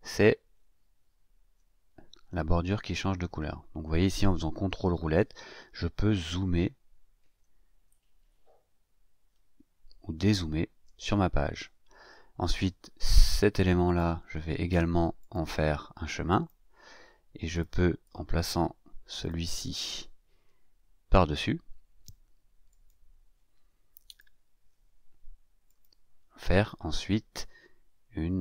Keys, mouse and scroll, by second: 0.4-1.2 ctrl+scroll up 3, 1.8 ctrl+scroll up 1, 4.6-5.4 ctrl+scroll down 3, 5.5 ctrl+scroll up 1, 6.4 ctrl+scroll up 1, 7.1 ctrl+scroll down 1, 8.6-9.5 ctrl+scroll up 3, 9.9-10.6 ctrl+scroll down 2, 13.2 scroll down 2, 13.8 click, 15.2 click, 16.2 click, 17.5 click, 18.0-19.4 drag, 22.7 click, 24.0 shift+click, 25.6 click.